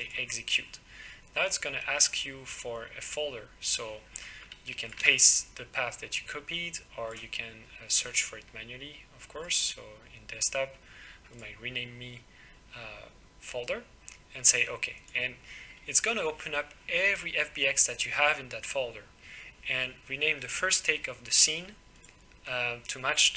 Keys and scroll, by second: 5.0 ctrl+v.